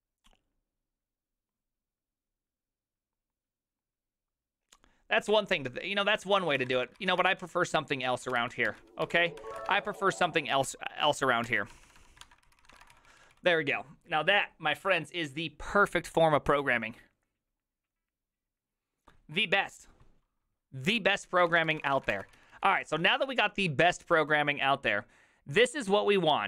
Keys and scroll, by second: 6.9-13.4 typing, 21.4-24.2 typing.